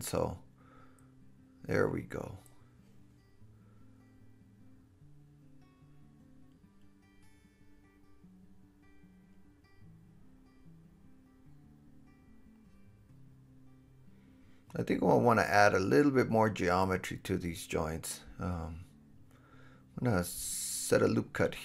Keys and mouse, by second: 0.3 click, 1.1 g, 1.5 drag, 2.0 g, 2.7 click, 3.5 g, 3.8 click, 4.3 g, 4.9 drag, 5.4 g, 6.3 click, 6.8 right click, 7.8 middle click, 8.0 right click, 8.1 click, 8.3 right click, 8.4 click, 8.6 right click, 10.5 KP_7, 13.8 Tab, 15.0 2, 15.3 Tab, 16.5-21.6 super+drag, 16.5 super+b.